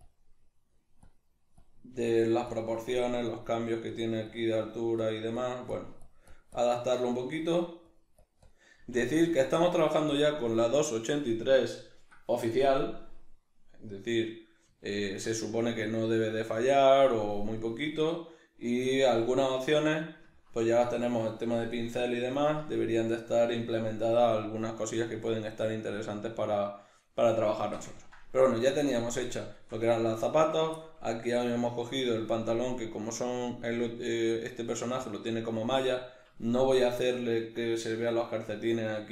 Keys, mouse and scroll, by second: 2.0 click, 2.0 f, 8.7 click, 8.7 f, 14.1 click, 14.8-17.6 shift+middle drag, 17.6-19.0 drag, 19.0-30.4 ctrl+middle drag, 29.0 Tab, 30.4 right click, 30.8-39.1 shift+middle drag.